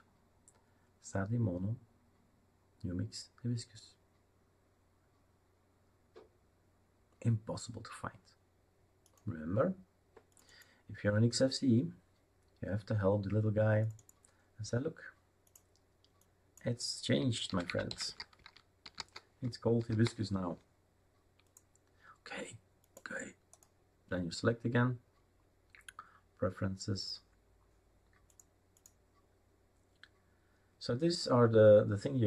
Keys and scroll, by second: 17.3-19.5 typing, 19.9 ctrl+s.